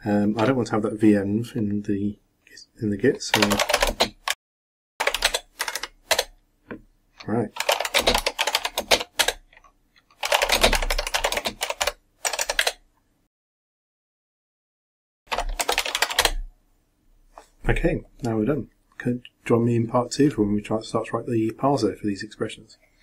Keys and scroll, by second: 4.4-5.6 typing, 6.1 Return, 14.6-16.6 typing.